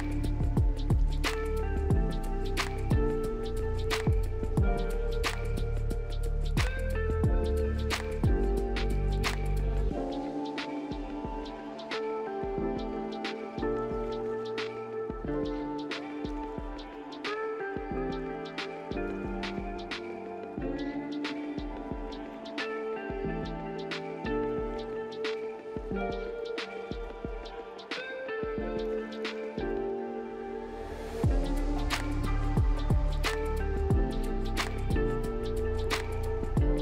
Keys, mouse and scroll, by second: 1.0 double click, 2.4 2, 2.5 Return, 6.1 1, 6.2 Return, 11.6 1, 11.7 Return, 27.5 double click, 28.4-29.6 typing, 32.3 typing, 32.6 double click, 33.4-34.4 typing, 35.6 double click, 36.2-36.8 typing.